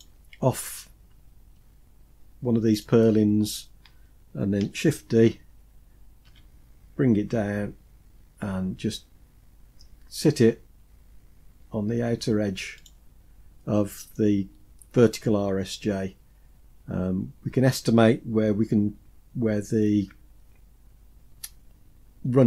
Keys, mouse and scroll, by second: 1.4 Tab, 2.6 click, 6.1 shift+d.